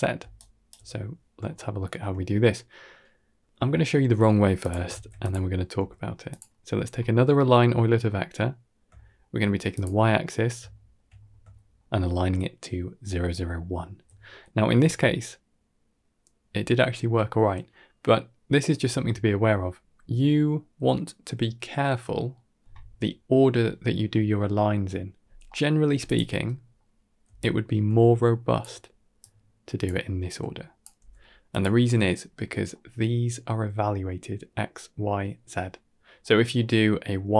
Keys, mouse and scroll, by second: 0.0 d, 0.7-1.3 shift+middle drag, 3.6 middle drag, 4.0 scroll down 2, 4.5 click, 4.8 shift+d, 5.6 g, 6.4 middle click, 6.7 scroll up 2, 6.9 middle click, 7.4 middle click, 7.9 middle click, 8.8 shift+middle click, 9.6 click, 10.1 middle drag, 10.6 shift+middle click, 11.0 scroll up 2, 11.4 shift+middle click, 14.3 shift+middle drag, 14.8-16.0 middle drag, 17.7 middle click, 17.9 middle click, 18.1-18.4 middle drag, 25.0 scroll down 2, 25.3 middle click, 25.9 click, 26.3-26.6 middle drag, 27.2 alt+click, 29.0-29.7 drag, 30.1-30.7 drag, 30.8 g, 32.1 scroll up 2, 32.4 middle click, 36.1-36.5 middle drag.